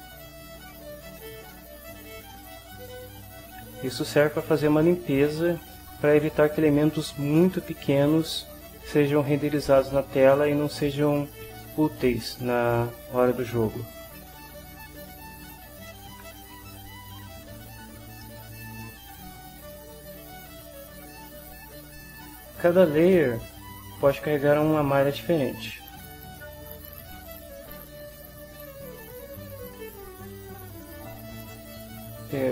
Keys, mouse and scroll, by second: 2.0 click, 3.1 2, 13.9 click, 15.4 click, 16.5 0, 18.2 middle click, 18.8 ctrl+middle click, 25.6 click, 27.2 click, 29.9 click, 31.5 click.